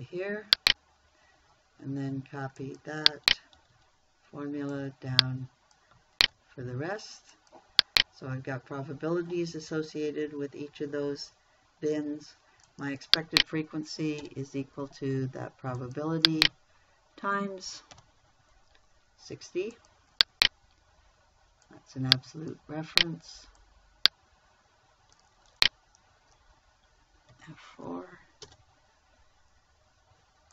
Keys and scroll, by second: 0.1 ctrl+v, 4.0 ctrl+c, 6.7 ctrl+v, 14.6 =, 18.4 shift+8, 27.8 F4, 28.9 Return.